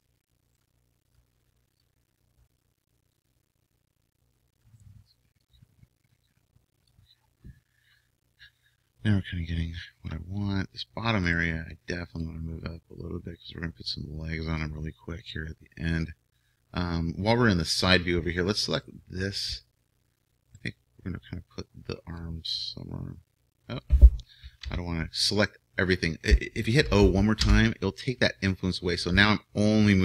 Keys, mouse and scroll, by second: 1.9-4.7 drag, 4.7-6.4 right drag, 5.5-7.1 drag, 8.6-11.3 middle drag, 11.3-13.1 right drag, 12.2-14.0 drag, 18.8-22.5 right drag, 22.2-24.1 drag, 24.6 ctrl+z, 27.4 o, 29.1-30.0 drag.